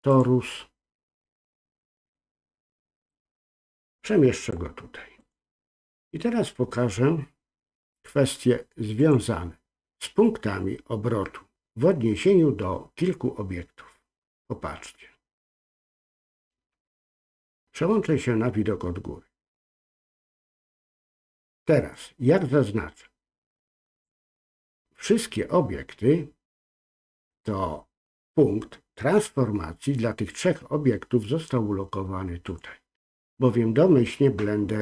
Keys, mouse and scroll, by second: 3.1-4.5 drag, 5.2 click, 9.0-15.0 drag, 17.2 KP_7, 18.1 scroll down 1, 21.9-24.0 drag, 32.4-34.8 drag.